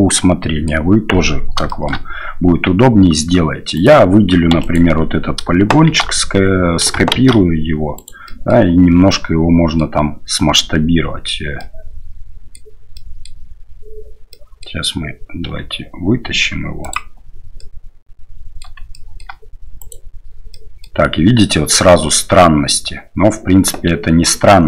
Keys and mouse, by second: 1.6 shift+middle drag, 2.5 Tab, 3.7 right click, 4.6 right click, 4.6 3, 5.9 shift+s, 7.2 shift+d, 8.3 click, 9.1 click, 11.6 click, 12.9 click, 14.3 middle click, 17.6-18.6 middle drag, 18.9 shift+middle click, 19.8 right click, 20.5 middle click.